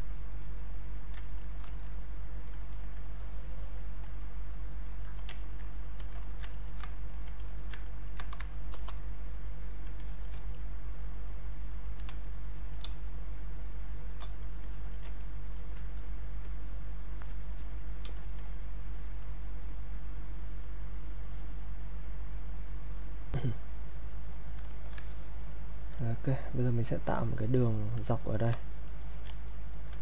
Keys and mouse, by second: 0.3 click, 1.2 ctrl+right click, 1.6 click, 1.6 click, 5.0 alt+click, 5.4 ctrl+right click, 5.8 click, 6.5 ctrl+right click, 7.1 alt+click, 7.9 ctrl+right click, 8.7 shift+f, 9.0 click, 10.5-12.9 ctrl+right drag, 12.9 space, 14.7 alt+click, 15.2 ctrl+right click, 15.9-23.3 drag, 23.3 ctrl+right click, 24.3 click, 24.7 alt+click, 25.1 ctrl+right click, 28.2 ctrl+right click, 28.7 click, 29.0 alt+click, 29.5 ctrl+right click.